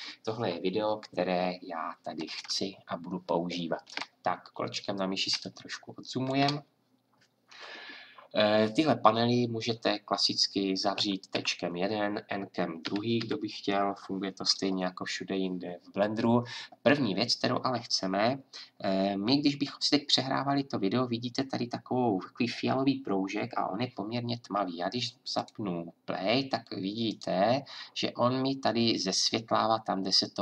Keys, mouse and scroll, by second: 11.0 t, 11.3 t, 12.8 n, 13.2 n, 25.3-29.1 drag.